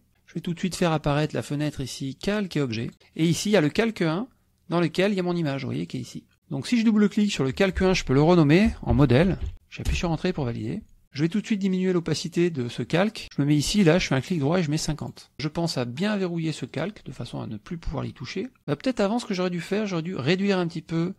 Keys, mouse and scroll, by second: 1.2 click, 5.4 click, 6.0 click, 7.6 click, 8.4-9.9 typing, 14.1 right click, 15.1 click, 16.7 click, 19.4 click.